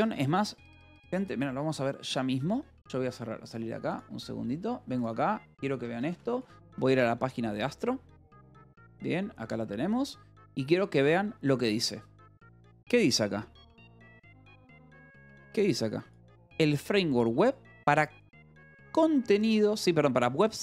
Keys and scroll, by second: 0.4 Escape.